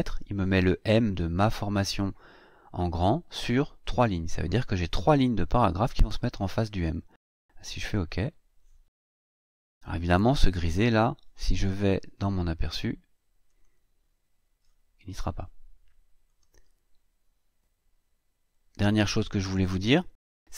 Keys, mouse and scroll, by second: 7.8 click, 9.1 click, 13.2 click, 16.0 click.